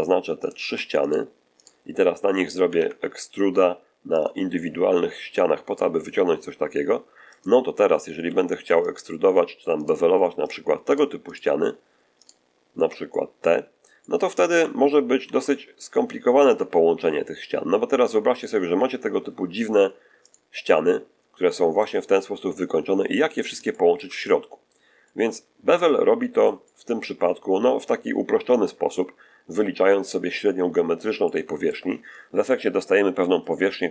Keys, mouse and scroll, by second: 0.3 shift+right click, 0.9 shift+right click, 1.5 shift+right click, 2.6 alt+shift+e, 4.1 click, 7.2 click, 8.1 2, 8.7 right click, 9.7 shift+right click, 10.3 shift+right click, 10.8 shift+right click, 11.2 shift+right click, 12.1 shift+right click, 13.0-14.5 shift+middle drag, 15.1 ctrl+b, 20.1 click, 20.7-22.2 middle drag, 21.9-22.2 scroll up 2, 23.2-23.5 scroll down 3, 23.6-24.8 shift+middle drag, 24.9-31.1 shift+middle drag, 33.3-33.9 middle drag.